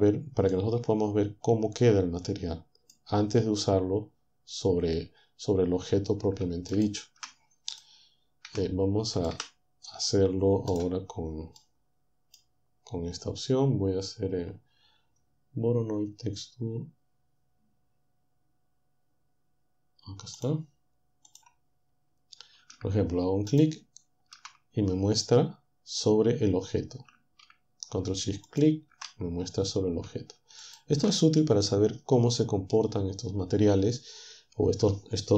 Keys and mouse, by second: 0.5 middle click, 0.8-3.4 middle drag, 6.8 ctrl+shift+click, 7.8 click, 8.5 Delete, 9.4 Delete, 11.9 click, 20.4 click, 21.3 click, 23.6 ctrl+shift+click, 28.5 ctrl+shift+click, 30.6 ctrl+shift+click.